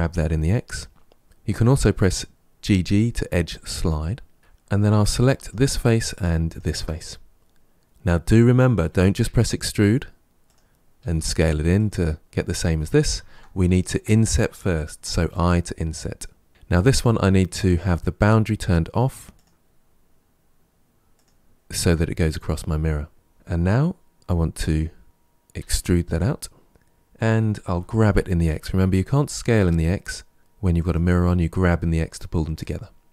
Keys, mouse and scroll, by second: 4.9 3, 5.2 click, 6.3 shift+click, 9.1 e, 10.9 s, 13.0 ctrl+z, 13.5 ctrl+z, 19.2 click, 21.0 click, 23.1-25.0 middle drag, 25.4 e, 26.7 middle click, 27.5 g, 32.4-33.1 middle drag.